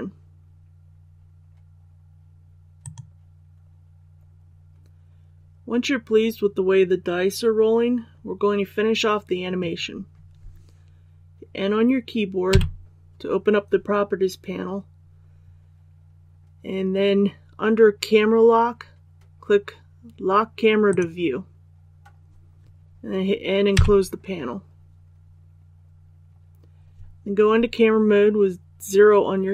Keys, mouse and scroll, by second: 12.4 n, 20.8 click, 23.7 n, 29.4 KP_0.